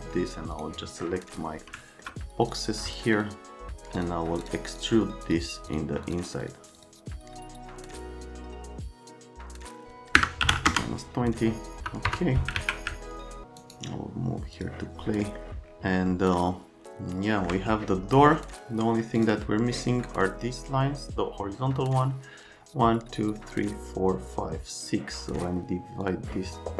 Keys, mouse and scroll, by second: 0.5 click, 1.0 right click, 1.6 right click, 2.5 middle click, 3.1 ctrl+right click, 4.0 ctrl+right click, 4.4 ctrl+right click, 4.8 ctrl+right click, 5.3 ctrl+right click, 5.7 ctrl+right click, 6.1 click, 6.4 click, 6.8 click, 7.2 ctrl+z, 7.3 click, 7.4 click, 7.5 click, 7.7 click, 8.7 click, 9.7 click, 10.1 KP_Subtract, 10.4 KP_3, 10.5 KP_0, 10.7 KP_Enter, 11.8 F3, 12.1 F3, 12.5 alt+q, 13.1 alt+middle click, 13.6 right click, 14.5 click, 15.2 middle click, 16.8 alt+right click, 19.2 click, 26.0 click.